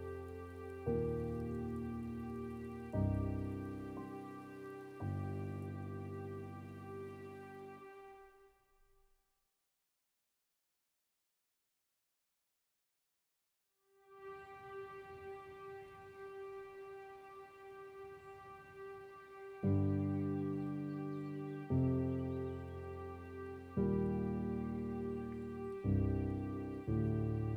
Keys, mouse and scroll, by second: 0.6 scroll down 2, 1.0-2.3 middle drag, 2.3 click, 2.8-3.3 scroll up 7, 3.3-4.5 middle drag, 4.5-5.1 scroll down 3, 5.1 middle click, 5.9 click, 6.6 scroll down 2, 6.7-8.1 middle drag, 8.1 click, 8.6 middle click, 9.3 scroll down 2, 9.5-10.3 scroll up 4, 10.3 click, 10.6 middle click, 10.9 scroll down 2, 12.1-13.7 middle drag, 13.7-15.9 drag, 15.9 scroll down 3, 16.5 middle click, 17.4 click, 18.1-21.0 middle drag, 21.0 click, 21.8 middle click, 22.2-22.5 scroll up 2, 22.5 middle click, 23.1 scroll up 2, 23.4-24.9 middle drag, 24.9-25.5 scroll down 6, 25.5 middle click, 26.0 scroll up 4, 26.5 middle click, 27.4 click.